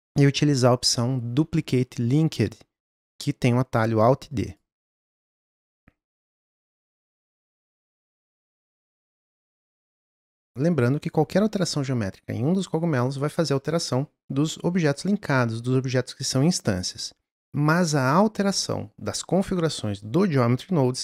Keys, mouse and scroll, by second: 8.0-9.2 drag, 10.4-11.3 scroll up 2, 16.6 click.